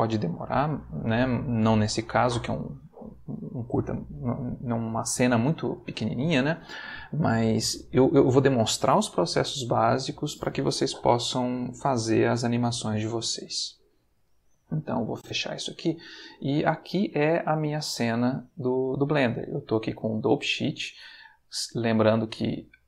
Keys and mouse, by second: 15.1 click, 18.2 click, 20.5 click, 22.5 click.